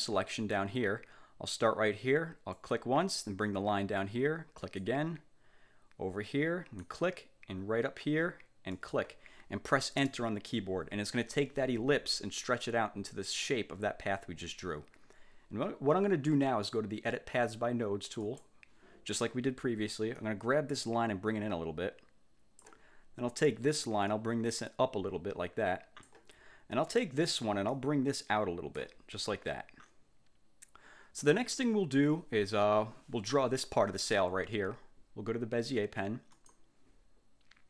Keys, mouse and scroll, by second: 2.7 click, 4.7 click, 6.9 click, 8.9 click, 10.1 Return, 18.3 click, 20.3-22.9 drag, 24.2-26.3 drag, 27.8-29.1 drag, 36.5 click.